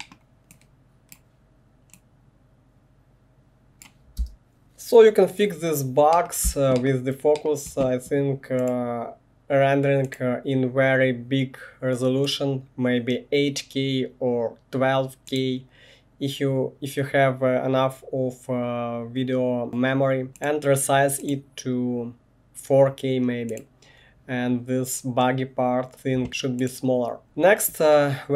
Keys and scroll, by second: 4.2 space, 6.5 space, 27.2 space.